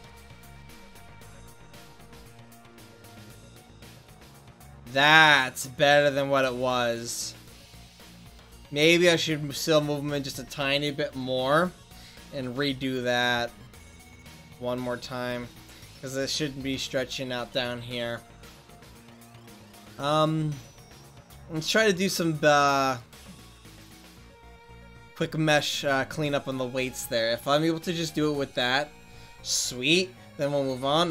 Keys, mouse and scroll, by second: 0.8 r, 13.2 r, 20.8-22.8 middle drag, 25.8-27.1 right drag, 27.5 click.